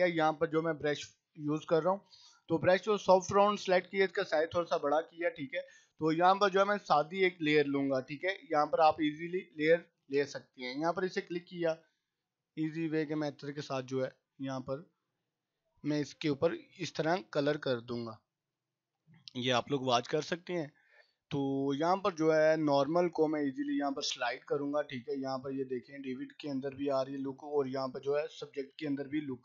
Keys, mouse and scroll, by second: 0.5 right click, 1.0 click, 1.7 right click, 2.8-4.3 drag, 10.5-20.1 drag, 28.1-29.4 drag.